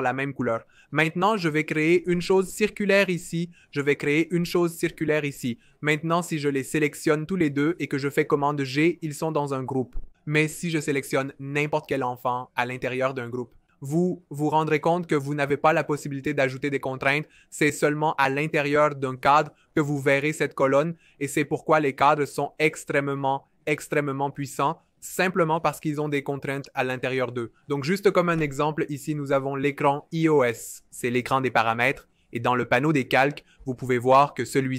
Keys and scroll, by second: 0.3-2.0 typing, 4.8 o, 8.1 super+g.